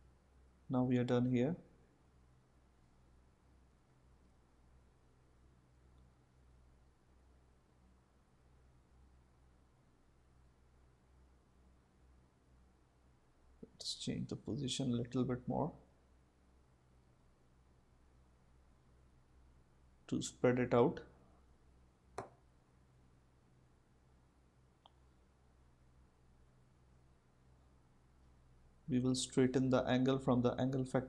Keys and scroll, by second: 6.2 Return.